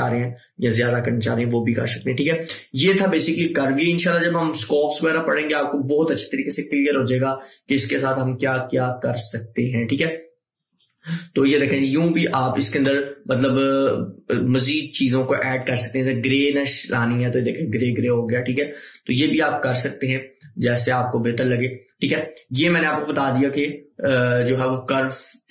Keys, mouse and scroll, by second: 10.9-14.4 drag, 14.4-23.9 drag, 14.4 typing.